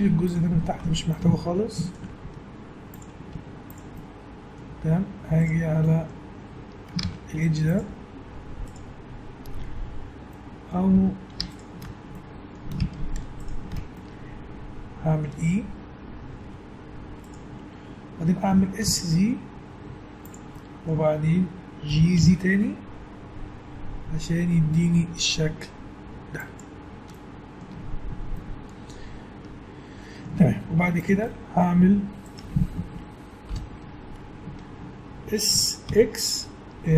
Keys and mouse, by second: 0.5 a, 2.2 x, 3.3 z, 7.0 ctrl+Tab, 9.7 click, 10.2-11.5 middle drag, 10.9 a, 11.5 click, 12.3-16.4 middle drag, 16.5 e, 18.5 s, 20.7-23.0 middle drag, 21.9 g, 27.1-31.0 middle drag, 27.7 Tab, 30.7 Tab, 33.5 ctrl+l, 35.5 s.